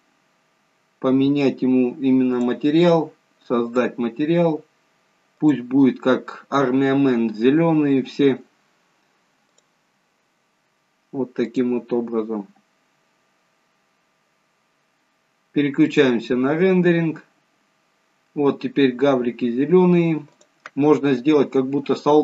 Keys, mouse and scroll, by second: 0.1 scroll up 3, 0.9 scroll up 2, 2.5 click, 3.8 click, 9.7 click, 17.4 click, 18.6 scroll up 1, 19.6 scroll down 1, 20.6 click.